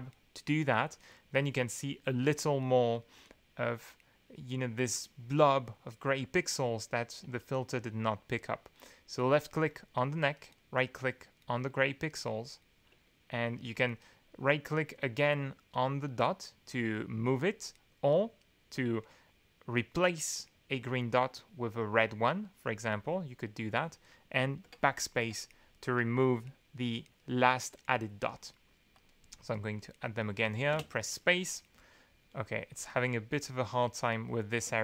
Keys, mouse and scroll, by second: 2.3-3.4 middle drag, 9.2 click, 10.3 right click, 12.0 right click, 14.0-15.1 right drag, 15.7-17.6 right drag, 18.4-23.5 drag, 24.6 BackSpace, 25.8 BackSpace, 28.9 click, 29.5 right click, 30.7 space, 32.9 right click, 33.8-34.2 scroll up 2, 34.6 space.